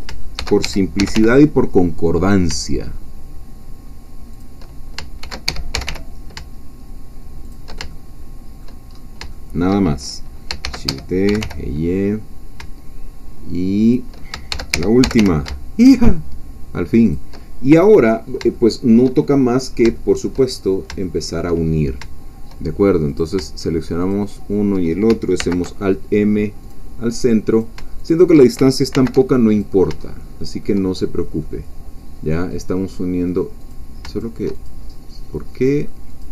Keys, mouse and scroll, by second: 0.3 shift+d, 0.6 shift+Escape, 1.0 shift+g, 1.1 shift+y, 4.3 shift+click, 5.2 shift+d, 5.5 Escape, 5.7 g, 5.9 y, 7.4 shift+click, 7.9 shift+middle click, 8.8 shift+scroll down 1, 8.9 shift+scroll up 1, 9.2 scroll down 1, 9.3 shift+middle click, 10.6 shift+d, 10.9 Escape, 11.3 g, 11.4 y, 13.9 shift+click, 14.5 d, 14.7 Escape, 15.0 g, 15.2 y, 17.1 shift+click, 18.5-20.5 shift+middle drag, 20.5-20.9 shift+scroll up 1, 21.0 shift+middle click, 23.2 click, 24.0 shift+click, 25.4 alt+m, 26.6 click, 27.6 shift+click, 28.9 alt+m, 29.5 alt+click, 30.1-31.2 alt+shift+middle drag, 31.2 scroll down 2, 31.4-33.1 middle drag, 33.1-33.7 scroll down 2, 33.7 click, 34.1 shift+click, 34.7 shift+click, 35.5 click, 36.2 click.